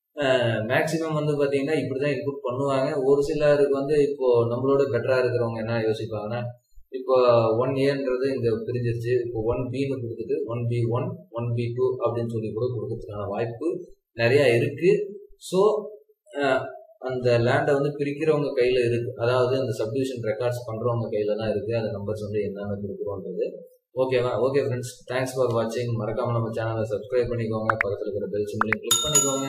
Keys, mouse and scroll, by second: 7.8 scroll up 1.